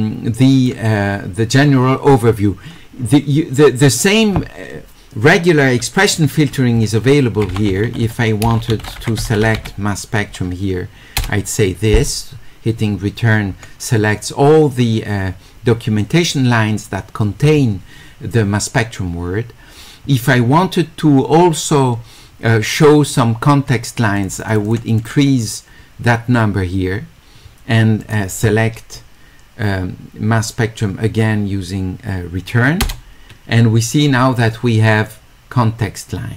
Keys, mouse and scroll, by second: 3.6 click, 7.5-9.4 typing, 24.2 click, 24.7 click, 25.0 click, 28.1 click, 35.1-36.3 drag.